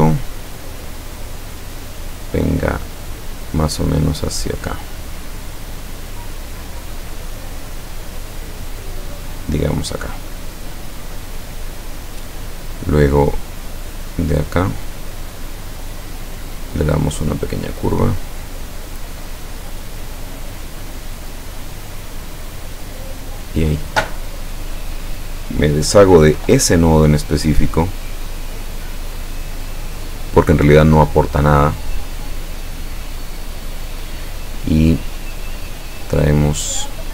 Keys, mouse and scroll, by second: 1.8 click, 9.6 click, 15.2 click, 16.4 click, 18.4 click, 20.4-21.7 drag, 23.2 click, 24.5 click, 25.3 click, 26.4 Delete, 27.7-29.0 drag, 34.1 click.